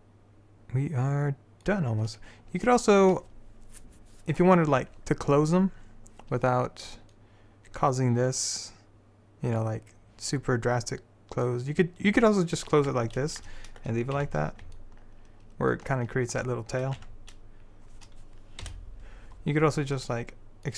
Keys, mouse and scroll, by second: 1.1-2.8 middle drag, 2.8-5.3 right drag, 5.3-7.2 middle drag, 7.2 click, 13.0 Tab, 14.3 z, 17.1 Tab, 18.8 KP_7.